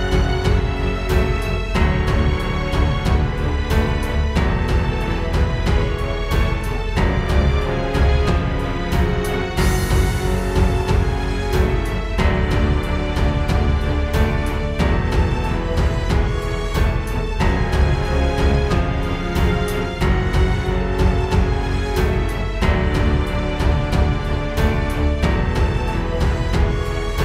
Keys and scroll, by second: 5.7 space, 6.2 super+space, 19.0 space, 19.3 space, 19.9 space, 20.5 space.